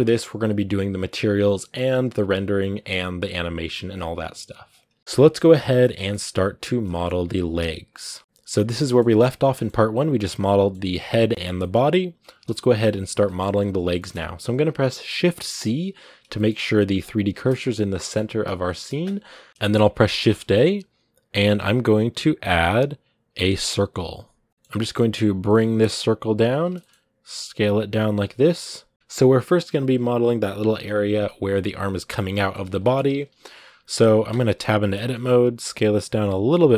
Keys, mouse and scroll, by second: 4.8-12.2 shift+middle drag, 12.2 KP_1, 13.0 shift+middle click, 13.3 scroll up 1, 13.7-15.3 shift+middle drag, 15.3 shift+c, 16.2 shift+middle click, 16.9 click, 17.1 shift+c, 17.8-24.3 shift+middle drag, 24.5 shift+middle click, 24.8 g, 26.6 shift+middle click, 26.7 scroll up 1, 27.0 s, 28.9-31.0 shift+middle drag, 31.0-32.6 scroll up 1, 32.6 shift+middle click, 32.7 scroll up 2, 33.4 scroll down 2, 34.1 Tab, 34.7-35.2 scroll up 1, 35.2 s.